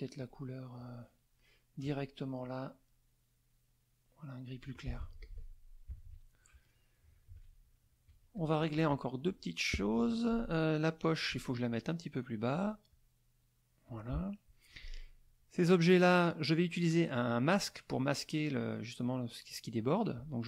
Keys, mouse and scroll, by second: 0.2 click, 2.4-4.7 drag, 5.0 F1, 5.2 click, 5.9 KP_Subtract, 6.7 middle click, 7.3 ctrl+s, 7.4 ctrl+click, 8.3 click, 8.3 z, 10.0 F1, 10.4 click, 12.5 click, 12.9 click, 13.9 click, 14.3 middle click, 15.2 click, 20.1 click.